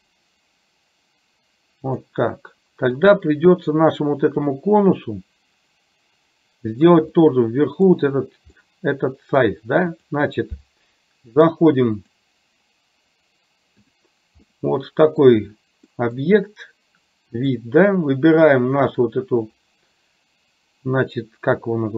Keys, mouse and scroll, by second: 3.1 click, 7.3-8.0 middle drag, 8.6-9.5 middle drag, 10.1 click, 14.5-15.4 middle drag, 16.0 middle click, 17.5 click.